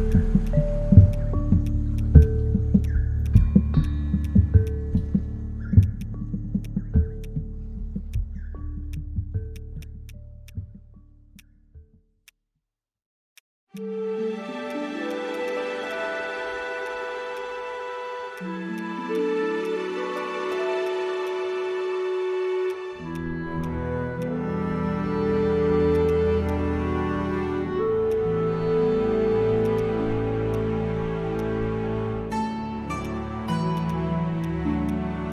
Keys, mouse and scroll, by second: 3.2 right click, 8.9 ctrl+click, 9.7 shift+click, 10.5 shift+click, 10.8 ctrl+z, 15.3 right click, 15.9 shift+click, 19.1 shift+click, 21.2 shift+click, 25.9 right click.